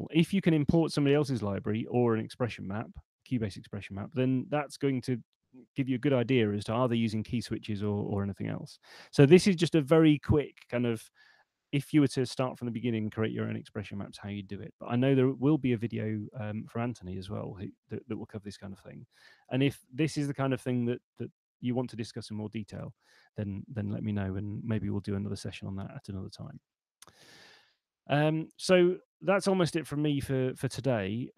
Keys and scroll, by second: 28.8 super+2.